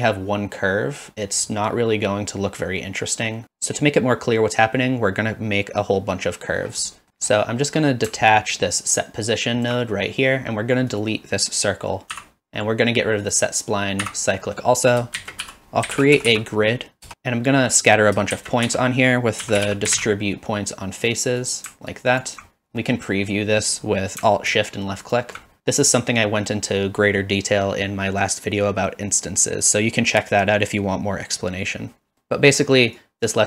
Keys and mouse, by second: 7.0 middle click, 8.5-9.7 alt+drag, 10.9 click, 12.1 x, 13.2 click, 14.0 x, 14.5 middle click, 14.8 click, 15.2 shift+a, 18.3 shift+a, 22.9 middle click, 25.1 alt+shift+click, 33.1-33.4 drag.